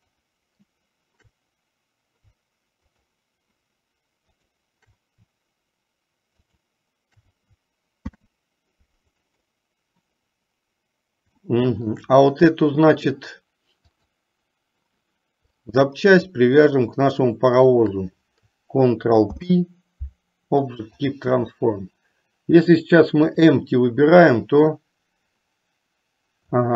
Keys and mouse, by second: 0.1 shift+click, 6.6 shift+click, 10.3 middle click, 11.6-12.1 shift+middle drag, 14.1 click, 19.7 ctrl+p, 23.3 click, 24.7-26.7 drag.